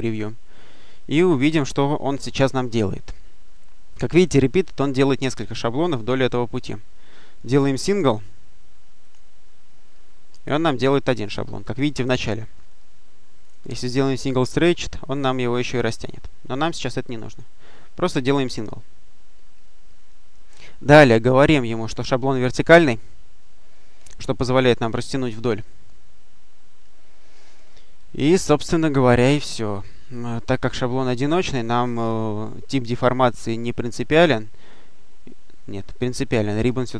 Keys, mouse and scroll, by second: 7.3-8.2 drag, 8.9 click, 13.3 click, 14.2 click, 16.4 click, 17.1 click, 22.5 click, 31.9 click, 34.0 click, 36.5 click.